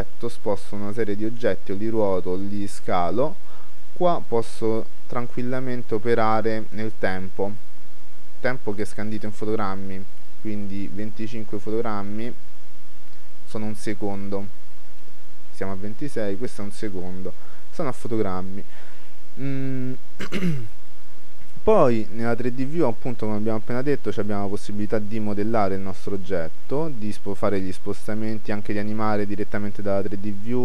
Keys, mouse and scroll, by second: 0.4-1.8 drag, 4.6-5.6 drag, 22.8-26.6 middle drag, 26.2-27.9 drag.